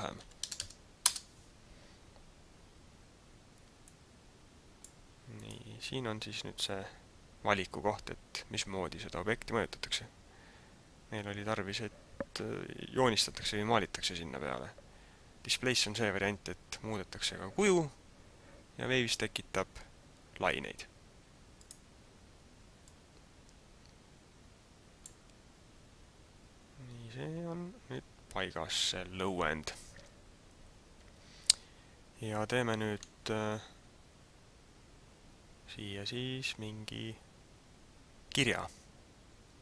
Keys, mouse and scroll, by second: 3.8 click, 5.3 click, 22.8 click, 28.9 middle click.